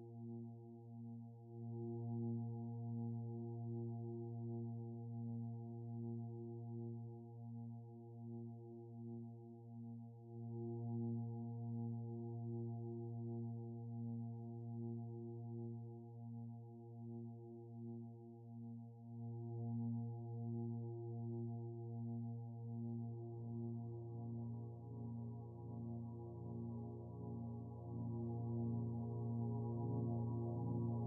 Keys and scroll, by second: 23.8 ctrl+t.